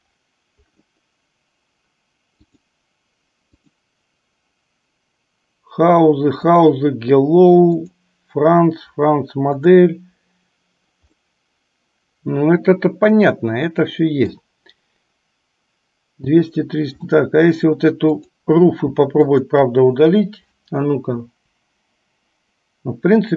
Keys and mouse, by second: 2.4 click, 4.0 click, 6.5 click, 8.2 click, 9.8 click, 11.8-14.8 middle drag, 19.7 shift+click, 21.6 Delete.